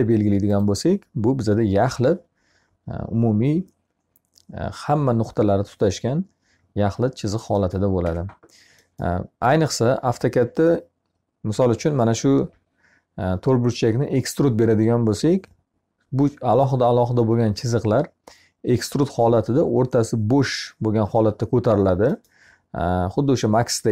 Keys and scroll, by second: 7.4 Escape.